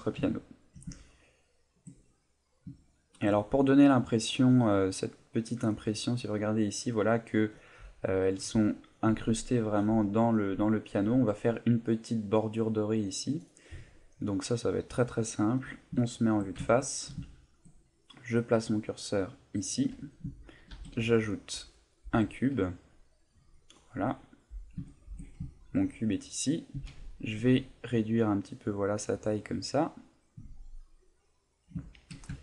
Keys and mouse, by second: 0.4 ctrl+middle click, 0.5 ctrl+middle click, 0.9 shift+middle click, 1.5 ctrl+middle click, 2.0 middle click, 2.7 shift+middle click, 15.6 KP_1, 16.1 shift+middle click, 16.7 ctrl+middle click, 17.2 shift+middle click, 19.5 click, 20.7 shift+a, 24.1 middle click, 24.9 shift+middle click, 25.4 ctrl+middle click, 26.7 s, 31.6 click, 31.8 shift+middle click, 32.3 ctrl+middle click.